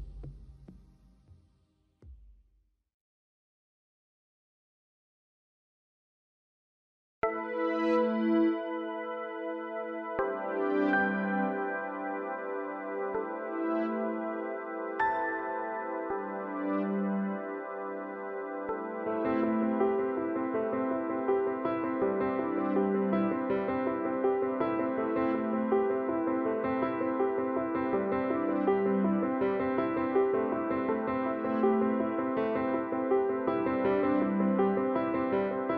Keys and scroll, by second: 5.8 Return.